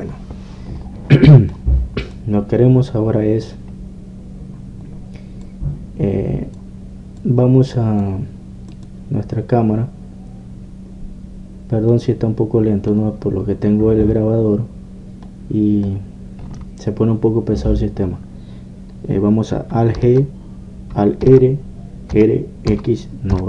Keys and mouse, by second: 1.3-6.5 middle drag, 6.5-12.0 drag, 12.0-18.0 middle drag, 21.0 alt+g.